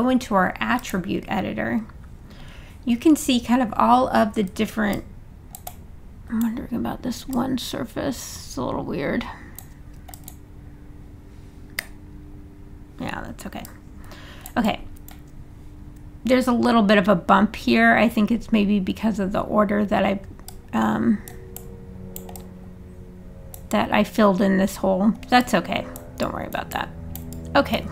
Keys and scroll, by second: 11.8 3.